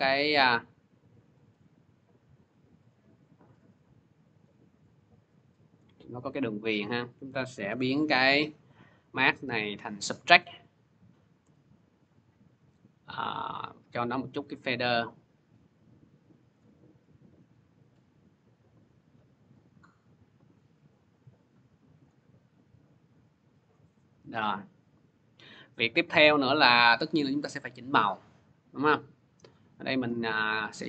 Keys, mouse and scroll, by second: 0.4 click, 1.2 click, 1.8 click, 2.5 click, 3.2 click, 3.8 click, 4.2 click, 4.7 click, 5.6 click, 7.0 click, 7.5 m, 9.0 click, 9.9 click, 11.8 click, 12.3 click, 16.4 click, 17.4 click, 21.9 click, 22.3 scroll, 23.4-23.7 scroll, 25.8 click, 25.8-26.8 scroll, 26.8 click, 28.1-28.8 scroll, 29.3 click.